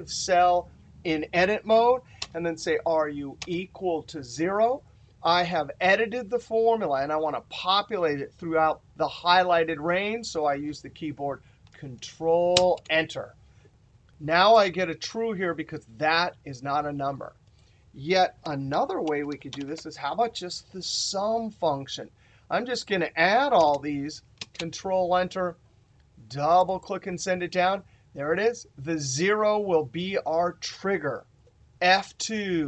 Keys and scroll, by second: 31.6 F2.